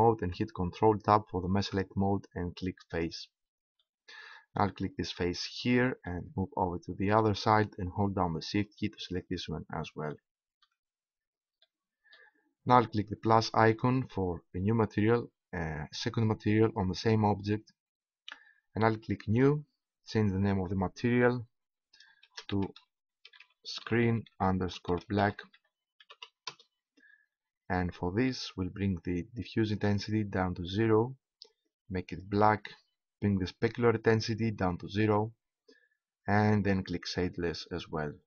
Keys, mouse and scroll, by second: 1.5 ctrl+Tab, 6.4 right click, 6.6 middle click, 7.7 middle click, 9.2 right click, 10.3 right click, 19.3-22.4 drag, 29.4-32.4 drag, 34.1 click, 35.1 click, 37.4-38.2 drag.